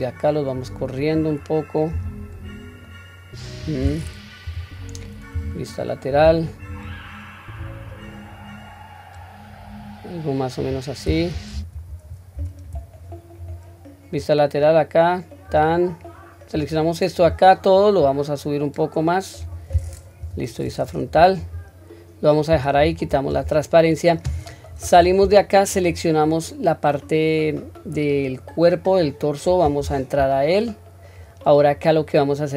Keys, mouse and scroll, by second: 1.9 q, 2.8-3.6 middle drag, 4.4 KP_1, 5.3 KP_3, 6.1-6.7 drag, 7.5 click, 7.8 click, 11.5 ctrl+z, 12.3 q, 13.0-13.5 drag, 14.2 click, 14.5 click, 16.5-17.3 drag, 18.0-19.4 drag, 20.2 KP_1, 20.9 scroll down 1, 21.4 click, 22.8 q, 25.0 Tab, 25.7 click, 28.5-28.8 scroll down 1, 29.0 scroll up 1, 29.8 Tab, 30.7-31.5 scroll up 1.